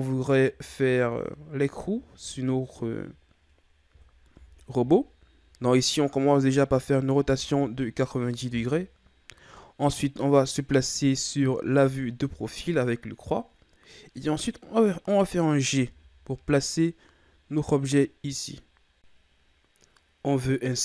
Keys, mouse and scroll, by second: 0.8-2.0 shift+scroll down 6, 2.0 shift+scroll down 4, 2.5-3.3 ctrl+scroll up 5, 4.3 r, 11.8 KP_3, 15.7 g, 19.9 ctrl+scroll up 2, 20.4-20.7 ctrl+scroll down 2, 20.7-20.8 scroll up 2.